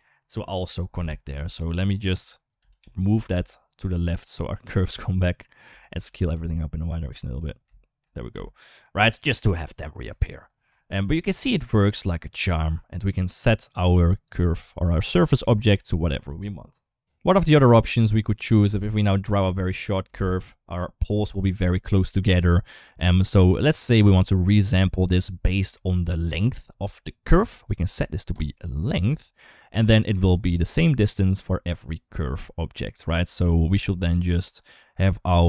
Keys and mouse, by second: 0.5 click, 0.7 Tab, 1.2 2, 1.5 click, 2.4 g, 5.5 a, 5.7 s, 7.4 shift+middle click, 8.1 Tab, 8.4 middle click, 8.8 shift+middle click, 10.0 shift+middle click, 10.5-11.8 middle drag, 12.1 click, 14.0 click, 16.8 ctrl+z, 16.8 Tab, 17.5 middle click, 18.2 middle click, 18.4 Tab, 19.8 Tab, 20.3 middle click, 22.4 middle click, 22.9 middle click, 23.7 middle click, 27.9-28.9 drag, 30.0 shift+middle click, 30.7-33.0 shift+drag, 33.3 shift+middle click, 35.2 middle click.